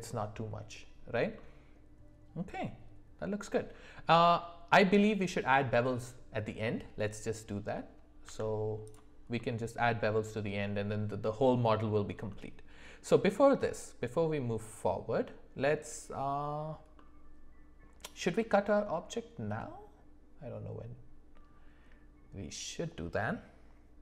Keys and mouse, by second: 1.4-4.1 middle drag, 8.2 Tab, 9.4-10.4 middle drag, 12.3 middle click, 17.0-24.0 middle drag.